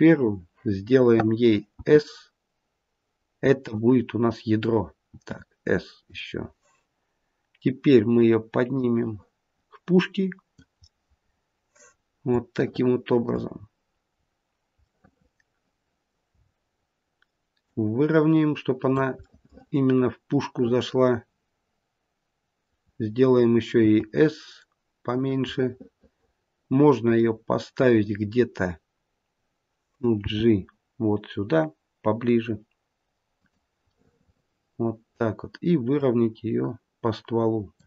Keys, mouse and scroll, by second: 1.7 s, 5.1 s, 8.7 click, 11.9 scroll up 2, 12.5 shift+middle click, 13.6-14.7 scroll down 2, 14.7 middle click, 14.7 scroll down 1, 16.3-16.8 scroll up 5, 17.5 click, 19.3 middle click, 23.7 s, 25.5 middle click, 25.7 middle click, 26.1 middle click, 26.3 middle click, 27.1 middle click, 27.2 scroll down 2, 30.1 g, 33.9 middle click, 34.3 middle click, 35.8 click.